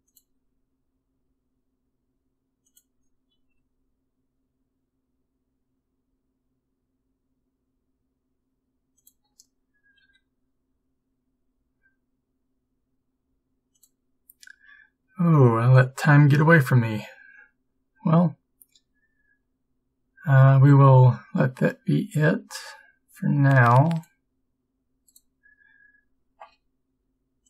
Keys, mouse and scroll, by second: 1.2 click, 1.2 g, 3.7-5.0 drag, 3.7 s, 10.1 click, 10.1 g.